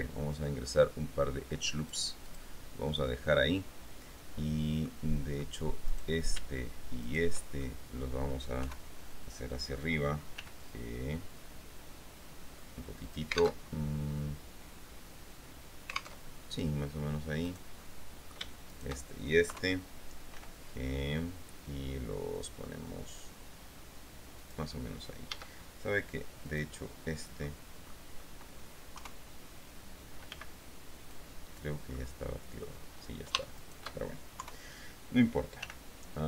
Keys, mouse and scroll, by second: 2.0-4.6 drag, 5.0 middle click, 6.1 right click, 7.2 shift+right click, 7.8 shift+click, 8.8 KP_3, 10.6 g, 13.2 alt+click, 13.8 alt+Tab, 16.4 alt+Tab, 18.0 click, 19.7 KP_3, 20.6 g, 24.6 click, 25.5 a, 26.6 click, 27.6 middle click, 28.4 middle click, 29.2 KP_3, 30.5 b, 31.3 click, 32.1 middle click, 33.8 shift+right click, 34.6 KP_3, 35.8 g.